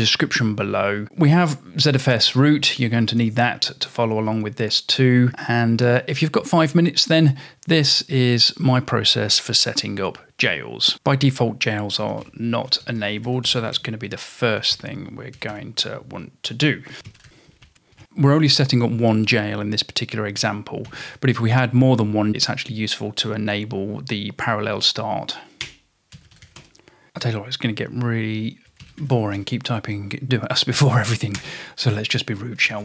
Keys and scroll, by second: 10.9-18.5 typing, 20.7-21.6 typing, 25.7 Return, 25.9-27.0 typing, 28.5-32.8 typing.